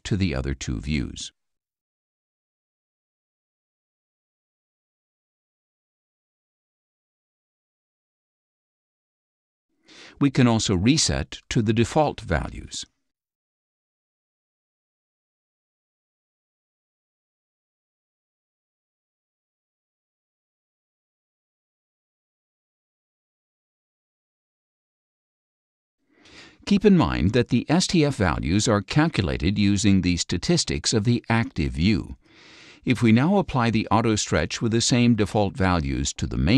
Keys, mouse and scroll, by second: 1.3 click, 4.4 click, 5.9 click, 7.6-9.3 drag, 9.5 ctrl+click, 11.2 click, 12.9 click, 15.0 click, 16.7 click, 17.7 click, 19.3 click, 23.5 click, 32.9 click.